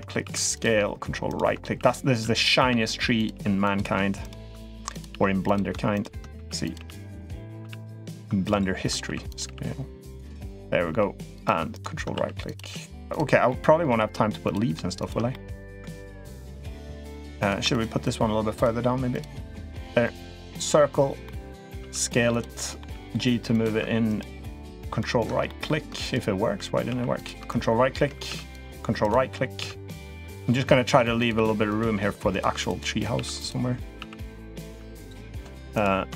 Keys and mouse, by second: 0.1 s, 1.6 s, 2.5 r, 3.1 g, 4.5 s, 4.9 g, 6.2 s, 6.6 g, 7.4 r, 8.9 s, 9.3 g, 10.7 g, 12.0 s, 12.4 g, 13.3 middle click, 14.3 click, 14.8 shift+click, 15.2 middle click, 16.1 shift+click, 16.5 shift+click, 17.2 click, 17.6 shift+click, 17.9 shift+click, 18.4 shift+click, 18.9 shift+click, 19.4 shift+click, 20.3 click, 21.1 middle click, 21.6 s, 22.4 middle click, 22.7 g, 24.6-25.0 ctrl+right drag, 25.2 middle click, 26.7 s, 28.1 s, 29.4 s, 30.8 s, 31.1 r, 31.7 g, 33.0 s, 33.8 s, 34.5 r, 36.0 s.